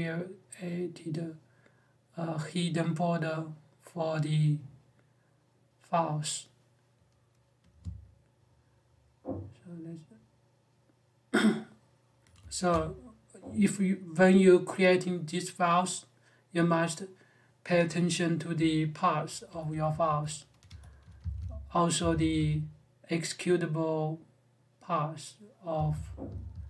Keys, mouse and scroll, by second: 18.3-22.1 typing, 25.5-26.3 typing.